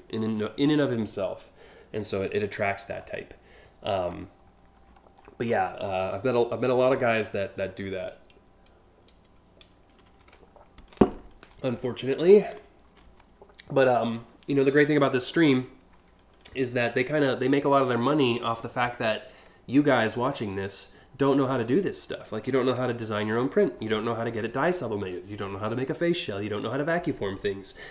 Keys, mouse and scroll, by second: 2.6 scroll up 1, 4.4-4.9 scroll up 2, 5.1-5.6 scroll down 4, 12.0 alt+scroll up 2, 13.8 scroll up 1, 16.9-17.4 scroll up 2, 18.1-18.7 scroll down 4, 22.3-22.6 scroll up 2, 23.4 scroll up 1.